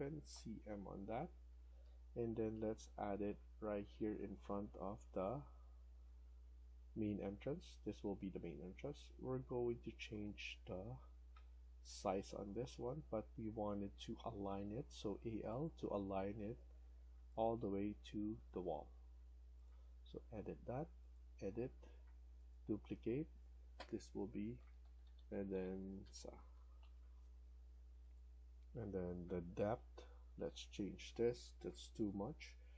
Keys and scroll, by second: 0.2-0.6 typing, 1.7 Escape, 6.2 Escape, 11.0-12.2 typing, 18.9 Escape, 19.0 Escape, 24.2-26.7 typing, 32.5-32.7 typing.